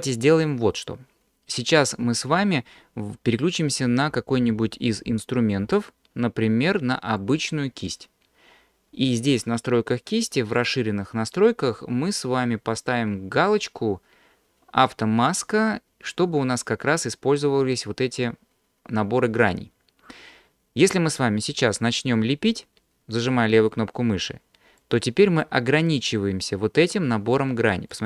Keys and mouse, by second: 7.3 click, 10.6 click, 19.2 click, 23.3 click, 24.8 click, 26.0 click, 26.9 click, 27.9 click.